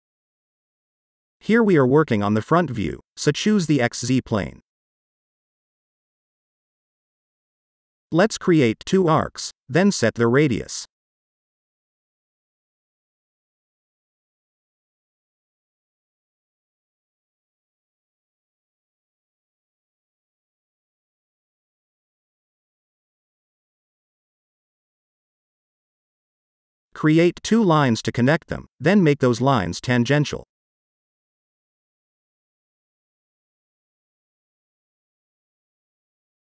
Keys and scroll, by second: 16.9 shift+r, 19.9-20.8 typing, 21.6 Return, 24.0-25.5 typing.